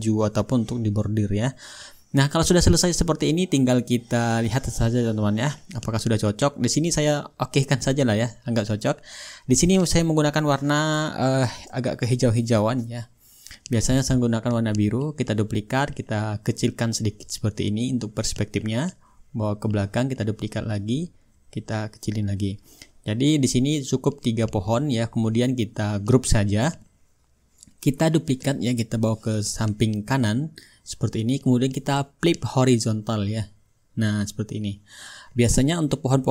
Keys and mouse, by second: 4.5 middle click, 5.4-9.4 shift+drag, 5.4-9.4 shift+right drag, 12.0-13.2 drag, 14.5-27.2 right drag, 15.4-27.2 drag, 27.3-28.5 drag, 29.4-33.5 right drag, 30.3-33.5 drag, 34.3-35.4 drag, 35.7-36.3 ctrl+shift+drag.